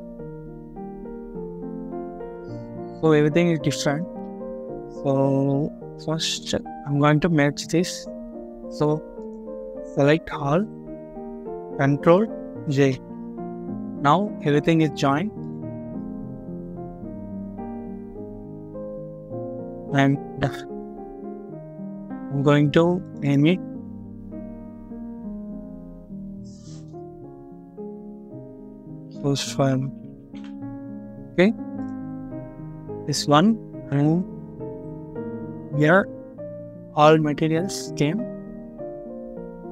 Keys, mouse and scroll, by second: 1.8 double click, 6.0-6.9 scroll down 1, 9.9 a, 12.8 ctrl+j, 20.0 scroll up 1, 23.2 double click, 27.6-30.0 typing, 30.3 Return.